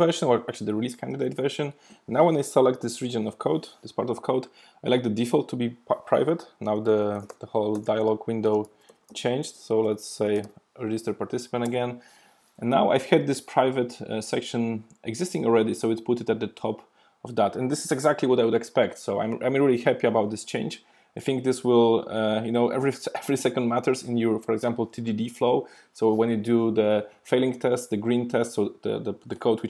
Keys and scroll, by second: 3.4 alt+super+m.